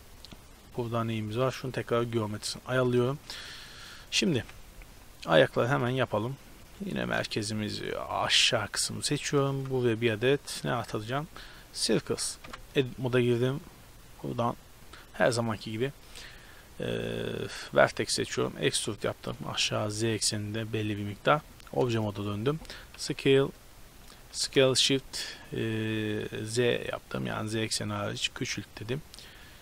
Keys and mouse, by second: 0.8-3.2 drag, 3.2-3.8 middle drag, 4.3 KP_Decimal, 5.8-6.2 middle drag, 6.2 Tab, 6.7 right click, 7.2 shift+s, 9.2 Tab, 9.6 shift+a, 11.8 s, 12.5 Tab, 13.6-15.4 drag, 17.1-20.9 middle drag, 18.4 e, 21.4 Tab, 24.4 s.